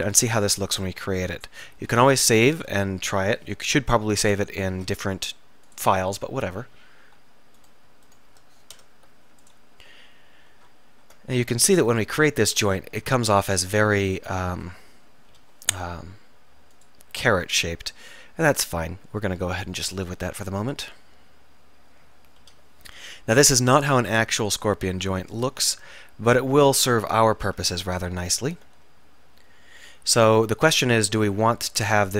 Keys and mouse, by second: 0.2-1.8 right drag, 1.8 ctrl+s, 5.1 alt+m, 7.7-8.9 drag, 8.8 alt+m, 11.7 ctrl+r, 13.5 ctrl+r, 15.4 k, 15.9 middle click, 18.0 middle click, 22.5 k.